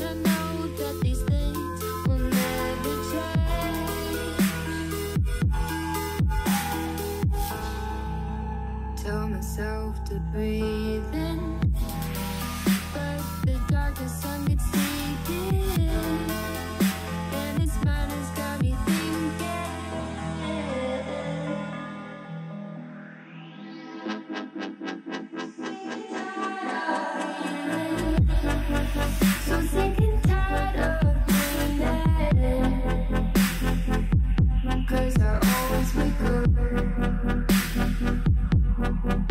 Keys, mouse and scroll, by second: 0.7 s, 2.2 s, 2.8 g, 4.2 e, 5.0 s, 6.7 g, 8.0 e, 8.7 s, 10.1 shift+middle click, 10.5 click, 11.2 e, 12.3 s, 13.9 e, 15.0 s, 16.2 g, 17.1 e, 18.1 s, 22.0-23.3 middle drag, 23.3 KP_3, 23.7-24.3 scroll up 1, 24.3 e, 25.3 s, 26.3 e, 27.5 s, 29.1 g, 29.9 e, 30.6 s, 32.4 e, 33.7 s, 35.6 e, 37.2 s.